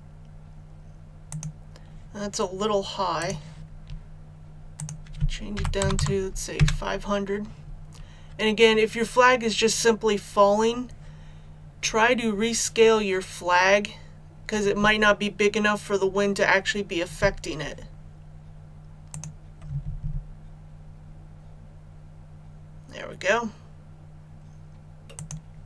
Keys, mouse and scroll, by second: 5.5 KP_5, 5.8 KP_0, 19.1 click.